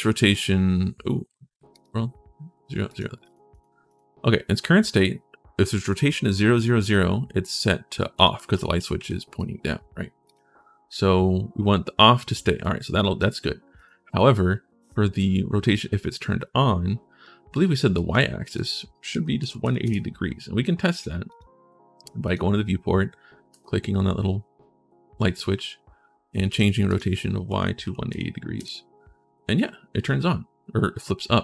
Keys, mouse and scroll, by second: 0.0 3, 1.5 click, 2.7 click, 3.0 click, 3.3 click, 7.7 right click, 7.9-9.2 typing, 10.0 click, 12.4 click, 13.5 click, 17.7 click, 18.3 click, 18.9 1, 20.7 click, 21.0 click, 22.0 click, 23.3 click, 26.2 click, 26.7 click, 27.2 1.